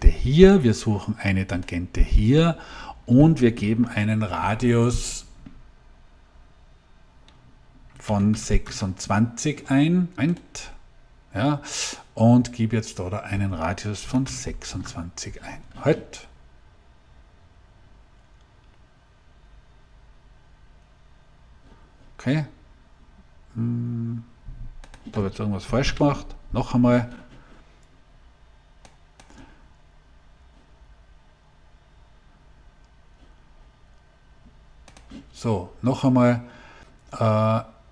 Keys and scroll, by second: 7.9 2, 8.3 6, 8.5 Return, 13.7-14.6 typing, 25.7 Delete.